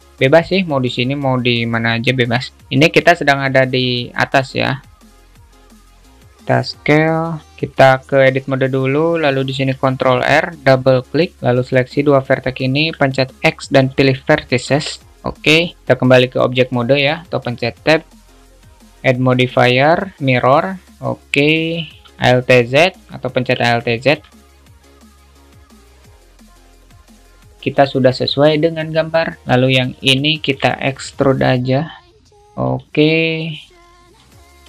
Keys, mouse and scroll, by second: 3.5 click, 4.5-5.3 drag, 5.9 alt+shift+z, 5.9 alt+shift+middle click, 6.3 s, 7.6 alt+z, 8.5 Tab, 9.8 ctrl+r, 11.4 click, 14.9 Tab, 18.9-20.7 drag, 23.7 Tab, 24.1 alt+shift+middle click, 24.9 click, 25.1 shift+middle click, 25.6 click, 26.1 alt+shift+middle click, 26.5 click, 26.9 click, 30.1 shift+click, 30.5 shift+middle click, 33.9 alt+middle click.